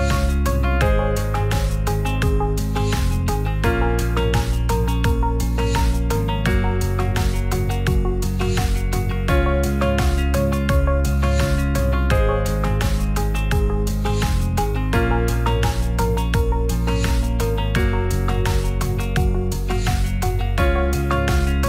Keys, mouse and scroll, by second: 0.7 middle click, 1.5 middle click, 2.2 Tab, 4.3 click, 5.5 click, 6.1-6.5 middle drag, 6.7-7.3 middle drag, 8.2-10.9 drag, 11.4-11.9 middle drag, 14.1 ctrl+2, 14.6-14.9 right drag, 16.0 right click, 18.0 click, 18.5 ctrl+a, 20.1-20.9 right drag, 21.5 click.